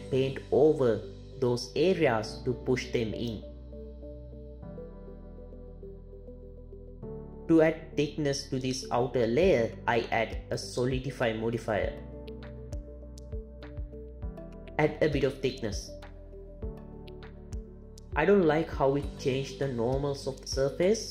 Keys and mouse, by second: 0.7 ctrl+click, 1.5 ctrl+click, 2.9 ctrl+click, 4.8 ctrl+Tab, 9.5 click, 10.1-13.0 drag, 16.6-17.8 shift+drag.